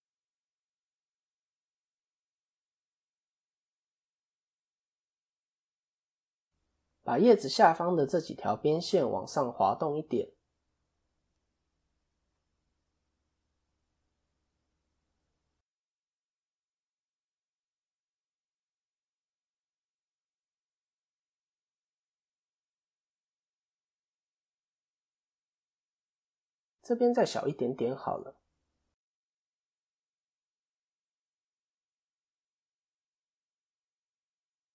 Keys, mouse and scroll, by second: 0.2 shift+click, 0.7 middle click, 1.7 shift+click, 2.2-2.6 scroll up 1, 2.6 middle click, 3.9 shift+click, 4.3-5.3 scroll down 4, 4.5 middle click, 6.2 KP_1, 6.6 KP_3, 8.0 shift+middle click, 8.6 1, 10.2 g, 13.5 KP_1, 14.3 ctrl+KP_3, 15.2 click, 15.9 KP_7, 16.9 shift+middle click, 19.1 click, 20.0 KP_3, 21.1 ctrl+KP_1, 22.3 KP_7, 24.0 ctrl+KP_3, 25.1 scroll down 1, 25.4 shift+middle click, 28.4 click, 29.2 KP_7, 30.1 click, 30.5 shift+middle click, 31.4 click.